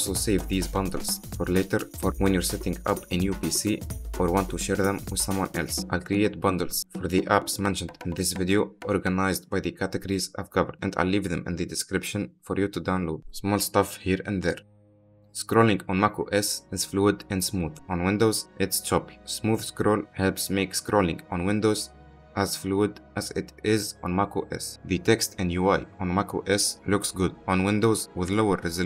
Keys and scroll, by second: 9.0-11.9 typing.